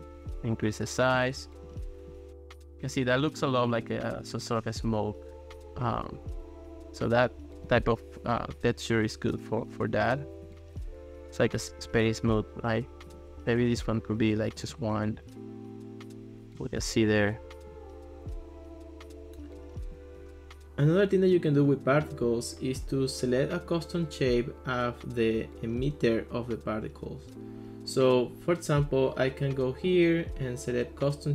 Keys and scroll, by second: 14.6 1, 14.8 Return.